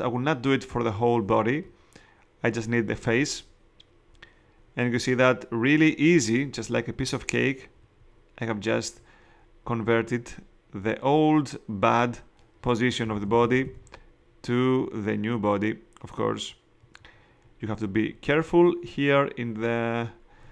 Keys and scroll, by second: 13.0 [.